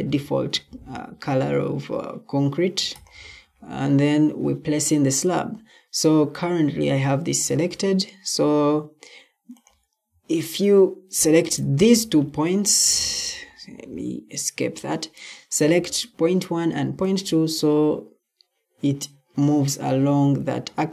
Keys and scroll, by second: 11.8 Escape, 12.9 Escape.